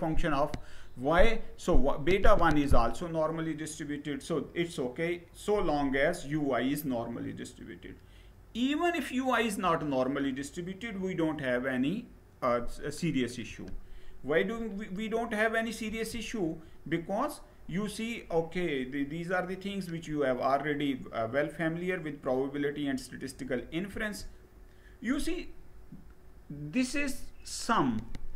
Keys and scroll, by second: 13.1 Down, 15.5 Down, 23.6 Down.